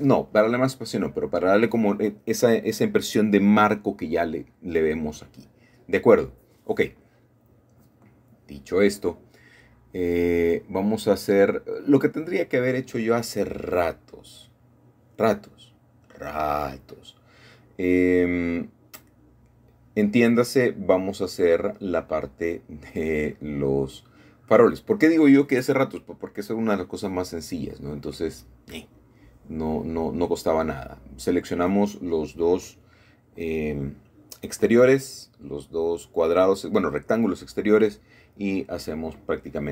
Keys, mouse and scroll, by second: 0.6-1.5 scroll down 1, 1.1 middle click, 1.5-2.8 middle drag, 3.3 middle click, 7.6 a, 7.7 a, 9.1 ctrl+r, 10.4 middle click, 11.4 Escape, 13.1-13.5 scroll up 2, 13.5 scroll down 2, 14.2 ctrl+z, 14.2 ctrl+scroll down 1, 15.2-15.7 scroll down 1, 15.6-17.0 middle drag, 17.2 a, 17.3 a, 19.2-21.2 middle drag, 21.7 i, 25.5 shift+click, 27.7-28.0 scroll up 1, 28.7 shift+middle click, 29.9 e, 33.6 shift+click, 34.5 typing, 35.3 Escape.